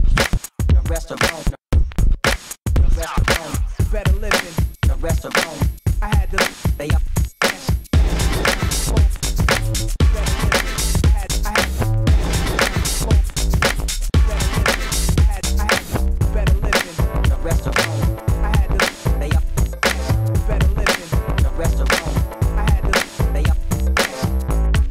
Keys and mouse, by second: 1.0 ctrl+e, 1.2 Tab, 1.8 a, 2.0 ctrl+s, 3.2 KP_1, 3.6 KP_1, 5.9 g, 6.0 Tab, 7.6 Tab, 7.9 KP_1, 8.5 g, 10.4 x, 11.4 shift+a, 11.9 Tab, 12.2 x, 13.3-14.4 drag, 14.4-15.3 middle drag, 14.6 x, 14.8 shift+c, 16.4 Tab, 17.1 shift+a, 17.6 Tab, 17.7 x, 18.9 click, 19.4 z, 21.0-23.0 typing, 21.4 click, 22.3 click, 22.6 ctrl+s, 23.6 click, 23.7 ctrl+r, 24.3 click, 24.8 g.